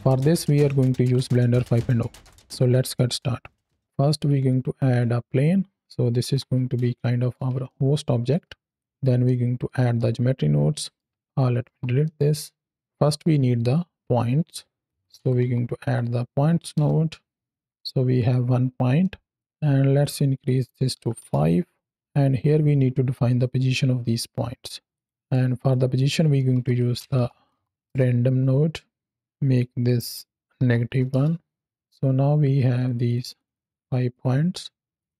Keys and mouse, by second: 3.8 shift+a, 6.1 alt+g, 6.8 shift+middle click, 7.6-8.2 ctrl+middle drag, 9.1 middle click, 9.8-10.8 ctrl+middle drag, 11.6 x, 11.9-12.8 middle drag, 12.8 shift+a, 14.0 shift+a, 18.9-19.3 middle drag, 19.7 click, 20.2 click, 22.1-24.5 drag, 25.1 middle click, 25.6 drag, 29.5-31.0 drag, 32.7 click, 32.9 click, 33.7 click, 34.0 click, 34.4 click, 34.9 click.